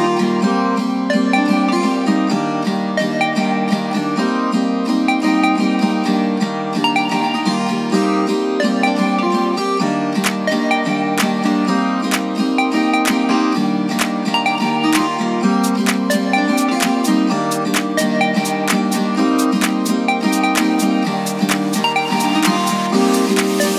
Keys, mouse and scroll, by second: 1.4-3.0 drag, 3.3-6.5 middle drag, 7.2 click, 7.6 shift+drag, 8.0 shift+click, 8.4 shift+click, 9.0 middle click, 10.6 i, 11.7 click, 12.4 click, 12.9-13.9 drag, 15.4 i, 16.6 click, 17.7 click, 19.4-20.7 middle drag, 21.2-23.0 drag.